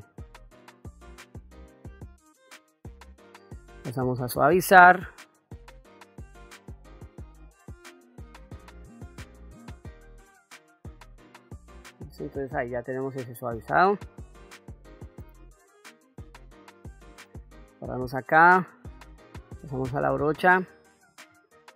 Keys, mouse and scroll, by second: 2.2 click, 3.6 click, 4.6-8.2 drag, 9.0 click, 10.2-11.2 middle drag, 11.6 middle click, 12.4 ctrl+middle click, 14.6 middle click, 15.9 ctrl+middle click, 17.0 shift+middle click, 19.3 click, 21.2 shift+f.